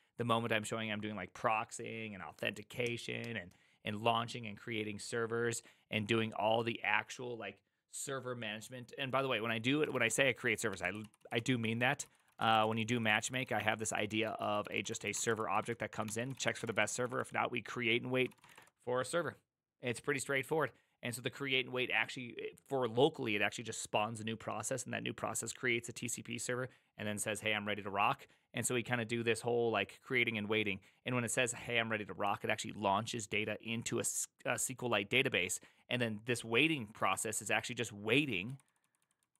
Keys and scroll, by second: 9.9 ctrl+^, 10.8 ctrl+u, 11.0 ctrl+u, 11.1 ctrl+u, 11.3 ctrl+u, 12.1-18.4 typing, 18.2 ctrl+c, 18.5 Return, 36.7-39.3 typing.